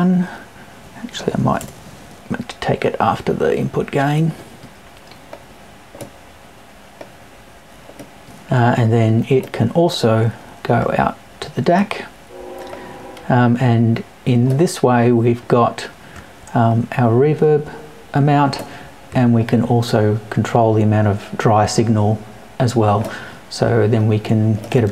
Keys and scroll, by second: 1.6 BackSpace.